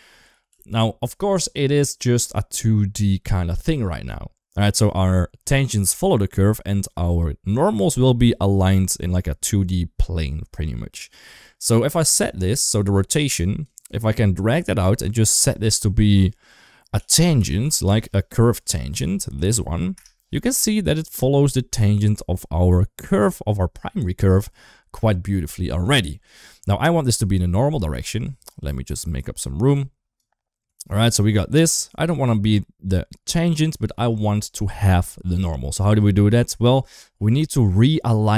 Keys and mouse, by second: 0.1 ctrl+z, 0.3 ctrl+z, 0.8 ctrl+z, 12.2-13.5 drag, 14.3-21.0 drag, 26.7 shift+middle click, 27.3 click, 28.2 shift+middle click, 28.7 click, 29.4-30.0 drag, 30.5 click, 31.5 shift+middle click, 33.8 shift+a.